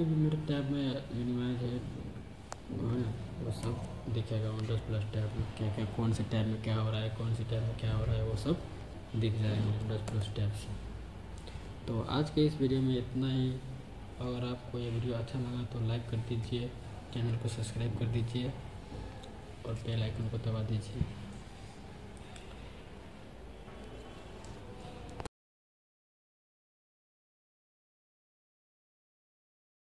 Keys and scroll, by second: 3.5 super+Tab, 10.0 super+Tab.